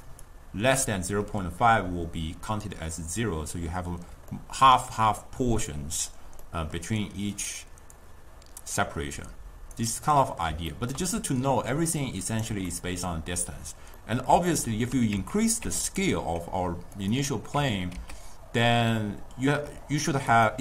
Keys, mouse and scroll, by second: 0.0-0.3 d, 0.6 click, 0.8-1.2 d, 3.7 d, 4.4 middle click, 4.7 d, 6.4-7.4 middle drag, 7.4-7.9 drag, 9.2-10.1 drag, 10.1-11.2 middle drag, 11.2 d, 11.4-12.5 right drag, 12.5 d, 12.7-15.2 middle drag, 15.2 Tab, 15.7 Tab, 15.9 click, 17.0 click, 17.6 Tab, 18.0 s.